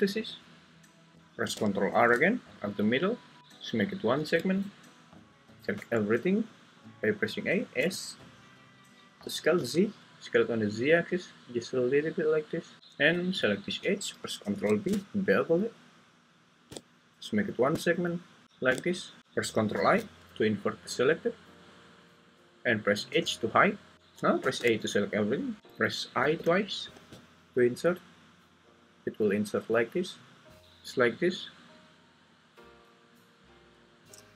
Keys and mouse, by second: 1.1 ctrl+z, 1.1 Escape, 1.9 ctrl+r, 4.3 Escape, 5.8 a, 7.8 s, 9.6 z, 14.4 ctrl+b, 18.5 shift+click, 19.2 Escape, 19.2 i, 19.7 ctrl+i, 23.1 h, 24.4 a, 25.6 Escape, 25.6 i, 26.2 i, 26.4 i.